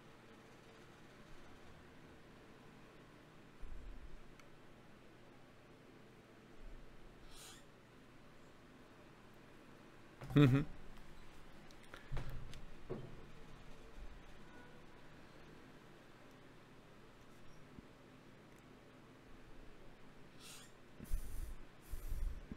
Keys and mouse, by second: 13.2 ctrl+b.